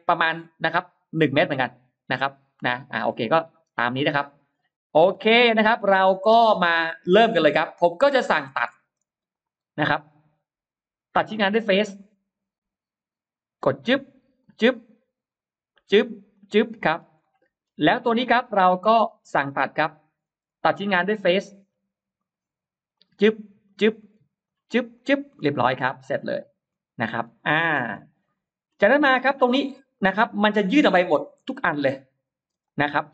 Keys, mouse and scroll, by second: 4.2 shift+right click, 5.1 scroll down 1, 5.6-7.8 middle drag, 8.1 scroll up 1, 8.2 middle click, 8.7 middle click, 9.2 click, 9.2 space, 11.8 click, 13.5 click, 14.2 click, 14.8-15.2 scroll up 1, 15.6 click, 16.2 click, 16.6 scroll down 2, 17.0 middle click, 17.4-18.2 scroll down 4, 18.0 middle click, 18.5-18.8 scroll up 2, 19.0 middle click, 19.8 middle click, 22.0 click, 22.8 click, 23.5 click, 23.9 scroll up 2, 24.3 click, 24.8 click, 25.2-25.9 scroll down 4, 26.3-26.9 scroll up 4, 27.0-27.8 scroll down 4, 28.1 middle click, 28.5-28.8 scroll down 1, 29.0 middle click, 29.8-30.1 scroll up 1, 30.3 middle click, 30.8-31.4 scroll up 4, 31.2 middle click, 32.5 click, 32.5 space.